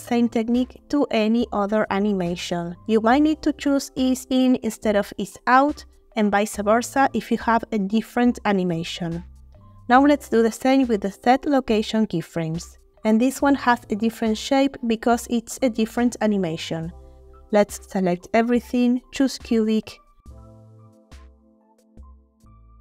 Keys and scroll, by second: 17.8 a.